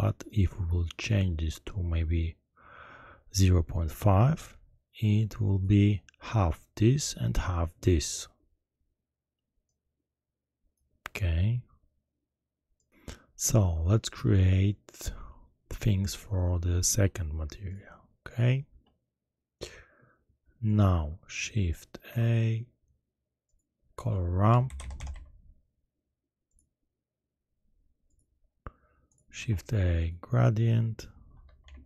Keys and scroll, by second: 22.0 shift+a, 24.5-25.1 typing, 29.3 shift+a, 31.4 g, 31.6 r.